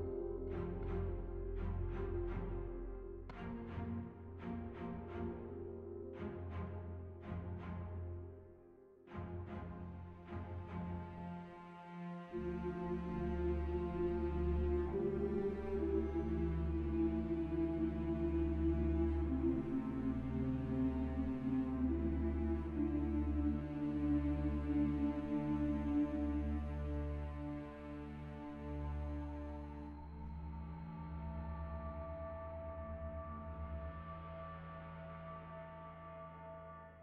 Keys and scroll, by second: 10.9 ctrl+r, 14.5 ctrl+r, 17.9 ctrl+r, 24.5 ctrl+r, 27.6 Tab.